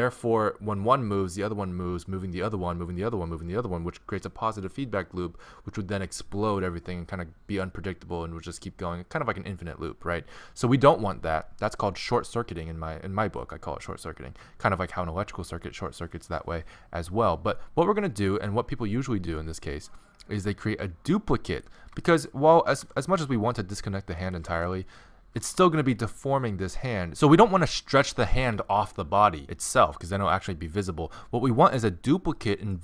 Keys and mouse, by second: 21.5 right click, 22.0-32.8 middle drag, 22.8 r.